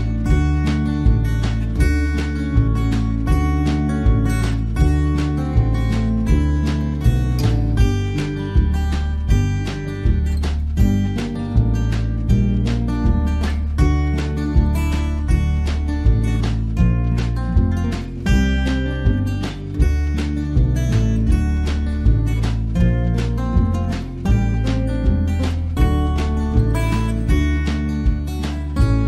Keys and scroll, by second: 12.8 ctrl+z, 20.4 ctrl+z.